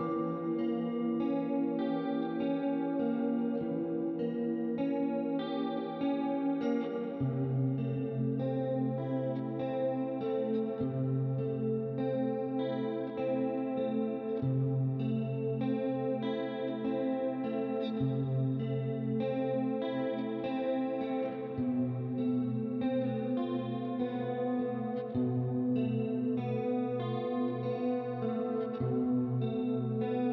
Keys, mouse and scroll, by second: 0.3 click, 3.0 middle click, 3.8 middle click, 4.5 click, 5.5 ctrl+d, 6.0 click, 7.6 middle click, 8.8 click, 9.8 middle click, 10.6 click, 12.2 click, 13.2 right click, 14.7 click, 15.7 right click, 17.5 click, 18.5 shift+click, 19.4 click, 20.2 click, 21.2 right click, 21.6 click, 23.0 ctrl+z, 23.4 click, 24.3 click, 25.1 right click, 26.1 right click, 26.6 middle click, 27.4 click, 28.2 middle click, 29.0 ctrl+d, 29.4 click.